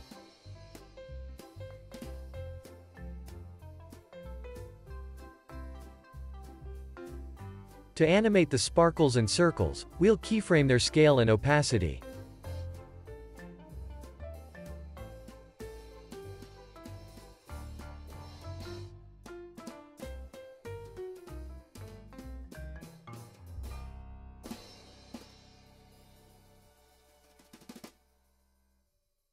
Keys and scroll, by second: 0.2 alt+z, 1.9 i, 2.2 super+s, 3.7 super+s, 6.3 super+s, 14.0 alt+x, 18.5-21.3 typing, 22.9 0, 23.2 Tab, 23.4 0, 23.5 Return, 28.3 alt+w, 29.2 x.